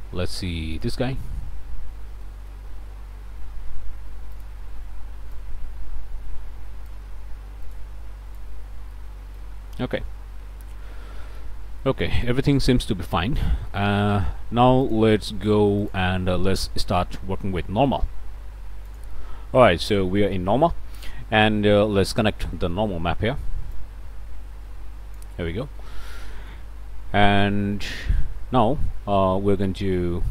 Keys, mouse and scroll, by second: 0.7 click, 1.7 middle click, 2.2 click, 2.7 middle click, 4.3 click, 5.3-7.1 drag, 7.7 click, 8.3 click, 8.9 click, 9.5 scroll down 1, 9.8 click, 10.2 scroll up 1, 10.6 click, 11.8-12.9 drag, 13.0 scroll down 1, 13.5 shift+click, 14.3 click, 15.8 click, 16.5-18.1 drag, 19.0 click, 20.2 shift+click, 21.4 click, 22.0 scroll up 1, 22.6 click, 23.8-25.4 drag, 26.2 click, 27.4 middle click, 28.0 middle click, 28.5 middle click, 30.0 middle click.